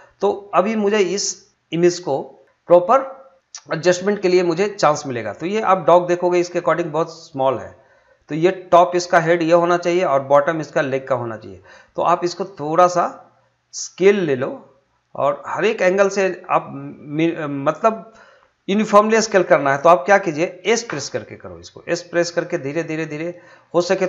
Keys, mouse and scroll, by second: 0.5 click, 0.9 middle click, 1.5-2.1 scroll up 1, 2.1-4.9 middle drag, 4.9-8.6 drag, 16.2 click, 23.0 s.